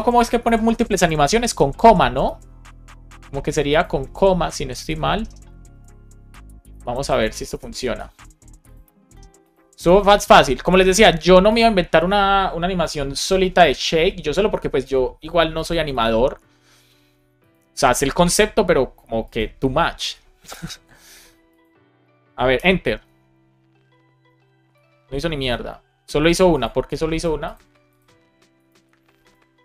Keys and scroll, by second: 0.3 Left, 1.0 shift+super+Right, 1.4 shift+Left, 2.2 super+x, 4.1 super+v, 4.8 space, 5.6 Down, 6.9 shift+super+Left, 7.3 BackSpace, 7.7 super+s, 20.5 ctrl+alt+5, 22.5 Return, 28.6 super+s.